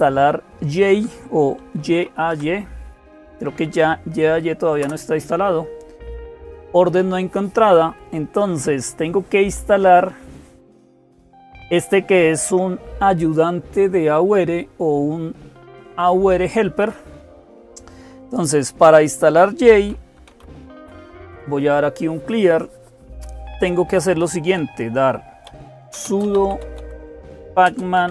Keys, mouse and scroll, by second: 0.0-28.1 typing, 4.6 Return.